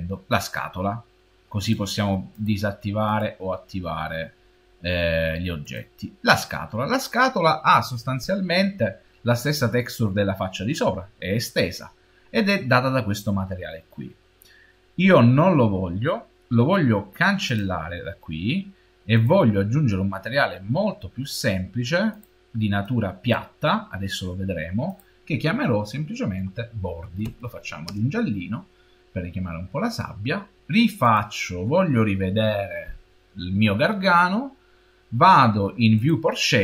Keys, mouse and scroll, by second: 1.5 Left, 2.2 Left, 2.9 Left, 5.5 Left, 17.3 Left, 19.0 Left, 21.1 Left, 24.7 Left, 30.9 Left, 36.0 click.